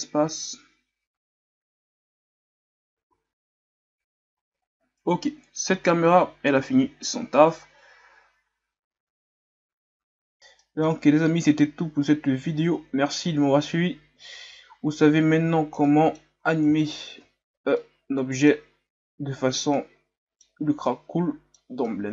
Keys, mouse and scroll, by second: 5.6-6.7 drag, 6.7 alt+a, 10.3 shift+scroll down 5, 10.6 middle click, 11.0 scroll up 2, 12.2-13.6 scroll down 6, 14.5 alt+a, 15.1-15.8 scroll down 1, 15.8-16.4 middle drag, 16.4-17.3 scroll down 1, 17.3-17.8 shift+scroll up 4, 17.8-18.5 middle drag, 18.5-19.1 scroll up 1, 19.7-22.1 middle drag.